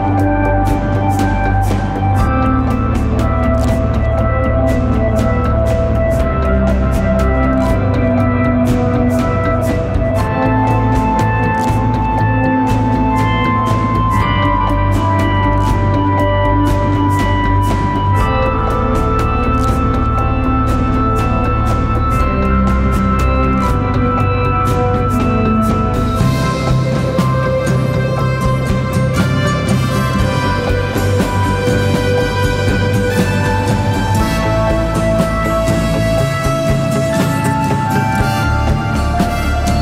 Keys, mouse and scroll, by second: 0.0-0.2 typing, 0.2 double click, 26.0 scroll up 1, 26.2 scroll down 1, 26.3-29.6 scroll up 1, 34.1 right click, 35.9-36.9 typing, 37.6 double click.